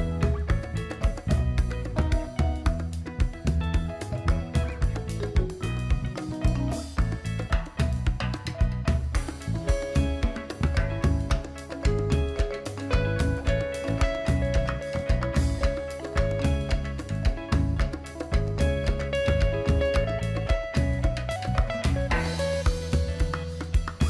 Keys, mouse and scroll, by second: 22.3 click.